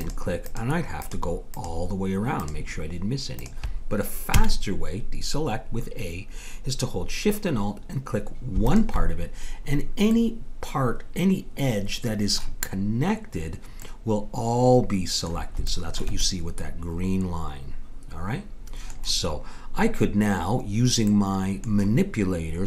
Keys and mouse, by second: 4.3 a, 8.7-10.4 drag, 10.4-11.9 middle drag, 13.8-17.8 middle drag, 21.2-22.6 middle drag.